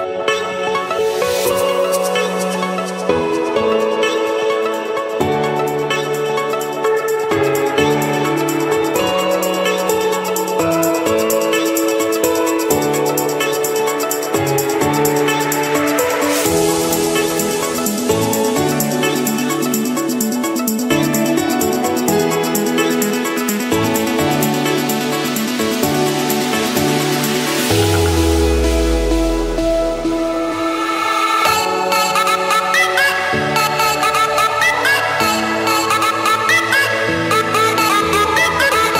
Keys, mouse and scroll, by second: 0.9-2.2 typing, 4.2 Return, 4.4 click, 5.1 click, 5.6 Return, 6.4-7.2 scroll down 2, 7.2-8.3 scroll down 1, 8.3-9.1 scroll up 2, 10.3 click, 12.1 click, 12.4-14.1 scroll, 14.1 scroll, 14.5 click, 14.8-15.5 scroll down 5, 15.5-16.0 scroll up 5, 16.8 click, 17.3-17.8 scroll up 5, 17.8 scroll, 18.6 click, 19.0-19.6 scroll down 5, 19.6-20.2 scroll up 5, 20.8 click, 21.0-22.8 scroll up 12, 23.6 click, 24.1-24.6 scroll up 1, 25.5 click, 26.1-26.5 scroll, 27.0 Escape, 28.7 c, 29.3 Return, 31.7-32.9 typing, 35.5-36.6 drag, 38.0 click.